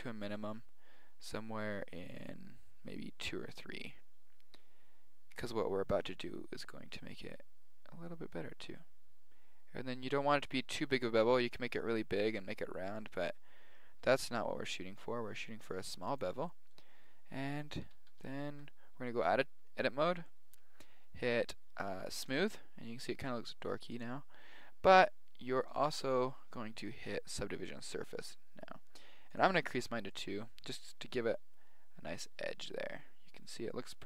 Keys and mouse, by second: 16.4-18.4 middle drag, 17.8 z, 18.0 z, 18.4 Tab, 19.0 middle click, 21.4 middle click, 22.1-25.9 drag, 29.3 click, 30.0 middle click, 31.0-33.1 middle drag, 33.4-34.0 middle drag.